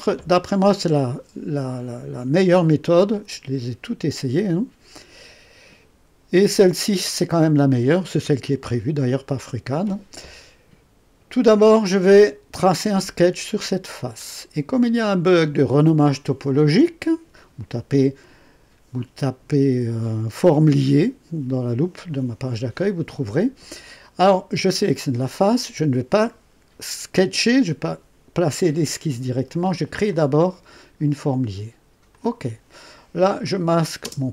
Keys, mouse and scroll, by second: 14.0 click, 30.0 click, 32.0 click, 33.4 click, 34.0 space.